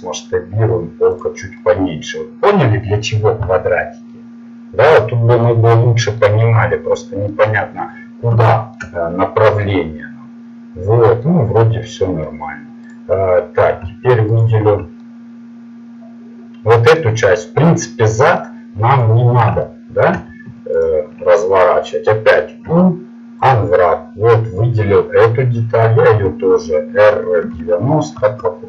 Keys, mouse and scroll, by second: 2.3-11.4 middle drag, 13.0 right click, 15.0 middle click, 16.0-18.0 middle drag, 18.2 middle click, 19.0-21.8 right drag, 22.6 u, 26.2 r.